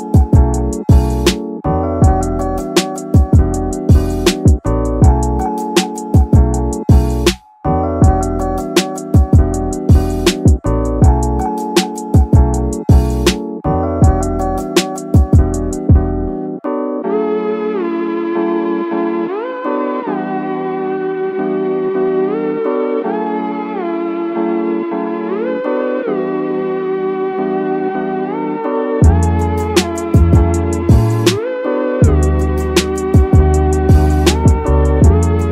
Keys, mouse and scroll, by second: 4.2 ctrl+r, 6.0 click, 7.2 ctrl+r, 7.9 ctrl+r, 8.0 ctrl+r, 10.0 click, 11.0 ctrl+r, 12.4 click, 13.5 ctrl+r, 16.7 e, 17.9 click, 18.8 shift+middle click, 19.2-19.5 scroll up 2, 19.5 middle click, 20.2 middle click, 21.4 ctrl+r, 23.1 click, 23.5 middle click, 24.4 ctrl+r, 26.7 click, 27.0 middle click, 27.4 scroll up 1, 27.5 scroll down 2, 27.6 middle click, 28.4 KP_1, 30.0-30.3 scroll up 2, 30.3 shift+middle click, 31.6 shift+middle click, 32.4 shift+middle click, 34.6 shift+middle click.